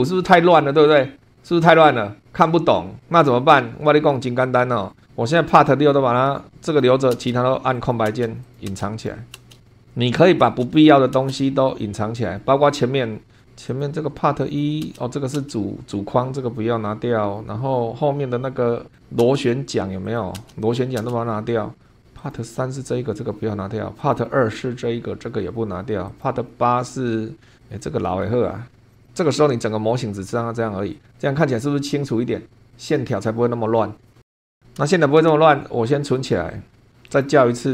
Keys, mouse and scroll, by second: 4.9 scroll up 2, 5.7 click, 6.6 click, 7.1 space, 7.7 click, 8.1 space, 8.4 click, 9.0 click, 9.3 space, 9.7-10.0 scroll down 2, 10.0 click, 10.5 space, 10.9 click, 11.2 space, 12.0-12.6 scroll up 2, 13.1 scroll up 2, 13.7 click, 14.4 click, 14.8 space, 16.1 scroll down 2, 17.3-17.9 scroll down 4, 18.9 click, 19.2 space, 20.0 click, 20.3 space, 20.6 click, 22.2 click, 24.0 click, 26.1 click, 26.8-28.0 middle drag, 28.9 click, 29.6-34.3 middle drag, 34.9-35.3 shift+middle drag, 36.1 click, 37.1 click.